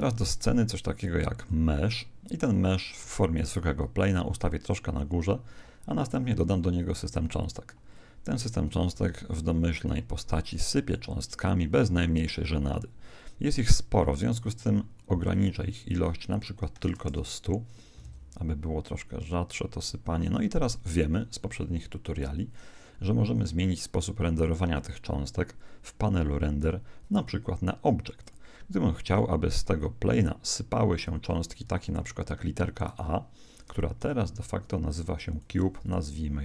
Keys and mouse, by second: 2.5-4.3 drag, 6.8-9.1 drag, 9.1 alt+a, 13.9 Escape, 15.3-17.2 drag, 18.0 alt+a, 20.3 Escape, 23.7-25.4 drag, 28.2-29.9 drag, 31.5-33.1 drag, 32.9 right click, 34.0 n, 35.3 click.